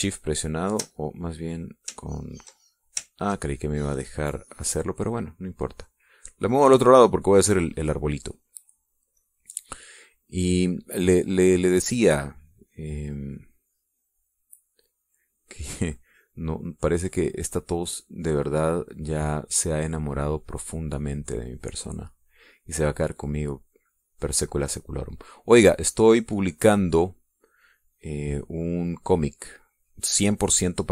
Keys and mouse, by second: 1.4 shift+click, 2.5-4.6 shift+drag, 4.7-7.9 ctrl+drag, 8.1 middle click, 10.3 click, 11.4 click, 12.8-16.5 drag, 17.3 click, 18.5-20.5 drag, 20.6-22.0 drag, 22.4-23.7 drag, 25.1-27.2 drag, 27.3-28.5 drag, 28.8-30.0 drag.